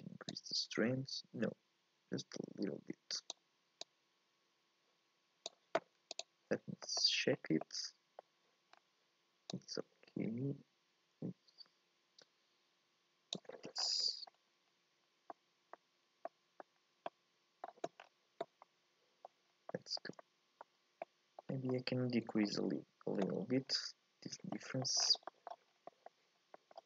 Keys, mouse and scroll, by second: 0.5-6.2 drag, 7.0 middle click, 7.4 scroll up 2, 7.6-9.7 middle drag, 9.7-12.5 drag, 14.3 scroll up 2, 14.7-15.3 scroll down 3, 15.3 middle click, 15.7-16.3 scroll up 1, 16.3 middle click, 16.8-17.1 scroll down 1, 17.1 middle click, 18.0-18.7 scroll down 1, 18.7 middle click, 19.4 scroll up 2, 19.7 shift+middle click, 20.6-21.0 scroll up 2, 21.0 middle click, 21.5 scroll down 1, 21.7-23.9 middle drag, 23.9-26.8 scroll up 1.